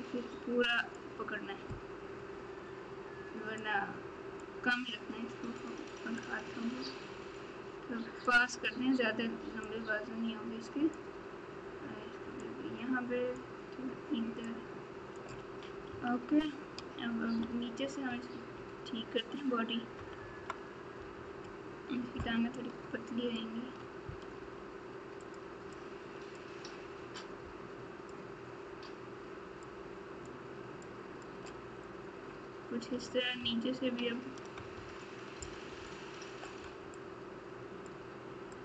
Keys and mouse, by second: 3.5 click, 6.2-8.2 drag, 9.6-10.9 drag, 12.4 click, 14.4 click, 15.9 KP_3, 17.3 KP_Subtract, 19.9 KP_Add, 22.5 click, 24.3 f, 25.8 click, 27.2 click, 29.6 click, 30.8 click, 34.5 KP_Add, 36.9 click, 38.5 click.